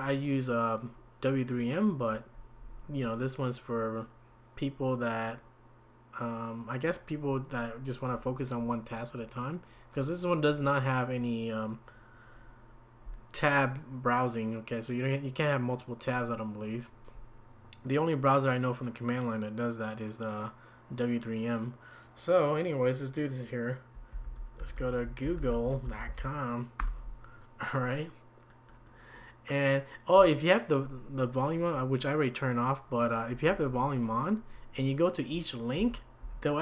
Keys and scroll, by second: 24.1-26.6 typing, 26.8 Return, 35.8 Down.